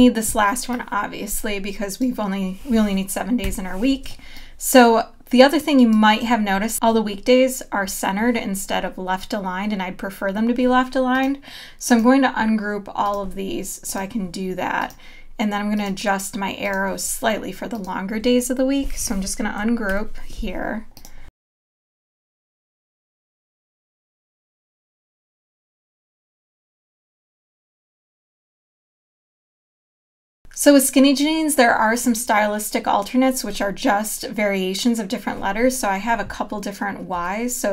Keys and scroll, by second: 3.4 BackSpace, 4.4 space, 19.9 shift+super+g, 22.0 Left, 23.6 space, 25.4 a, 26.1 v, 26.7 a, 27.8 z, 28.1 a, 29.7 super+-, 30.1 space, 37.2 t.